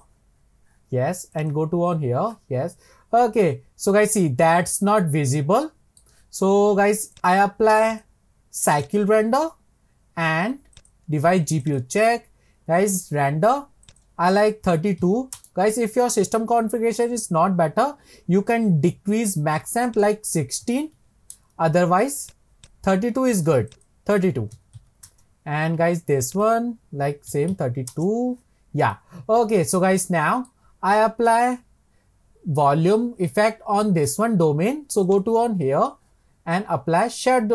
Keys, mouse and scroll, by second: 1.4 click, 2.9 scroll up 4, 3.2-6.2 middle drag, 7.1 click, 7.9-13.8 drag, 13.9-17.0 drag, 19.9-22.7 drag, 23.7-28.9 drag, 28.9-32.0 middle drag, 35.1 click.